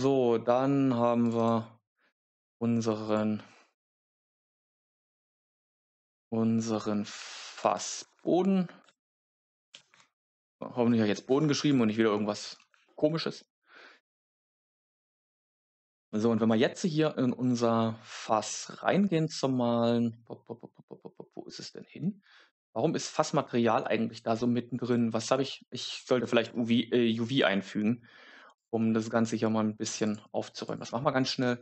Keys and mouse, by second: 1.1 click, 1.3-3.0 drag, 4.8 click, 5.0-11.2 drag, 7.5 shift+BackSpace, 7.6 shift+BackSpace, 8.1 shift+BackSpace, 13.1 middle click, 15.3 Tab, 28.5 click, 29.8 click, 29.9-31.6 drag.